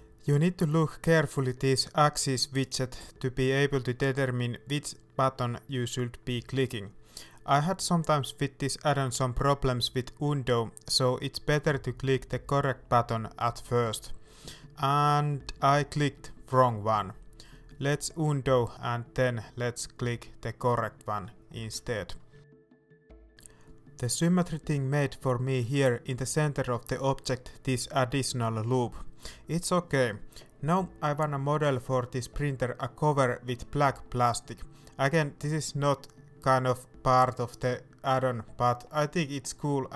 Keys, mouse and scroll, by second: 13.1 middle click, 15.7 ctrl+z, 16.5 middle click, 17.7 Tab, 18.0-19.9 middle drag, 19.9-23.9 drag, 23.9-24.4 scroll up 2, 24.5 middle click, 25.1 right click, 25.3 Tab, 25.5 middle click, 26.0 scroll up 1, 26.3 alt+a, 27.9 click, 28.5-29.9 right drag, 29.9 shift+middle click, 30.7-31.7 scroll up 1, 31.7 e, 34.3 shift+click, 34.5 middle click, 35.4-36.8 middle drag, 36.8 right click, 39.3 ctrl+right click, 39.7 middle click.